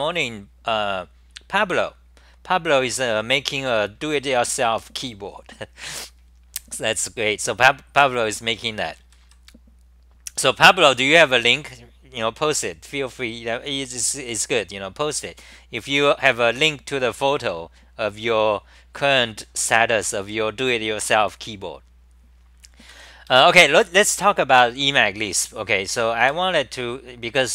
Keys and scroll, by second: 14.9 s, 23.3 d, 26.2 super+r.